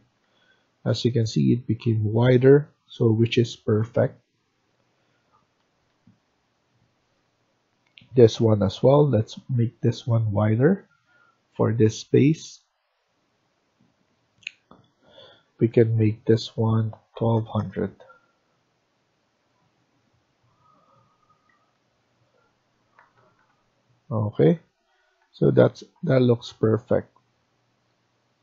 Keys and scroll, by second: 0.2 Escape, 4.1 Down, 5.5 Escape, 5.9 Escape, 16.6-17.7 typing, 21.4 Escape, 21.7 Escape, 22.9 Down, 23.0 Down, 23.3 Down, 24.3 Down, 24.4 Down, 24.7 Right, 25.1 Right, 25.7 Escape, 25.9 Escape.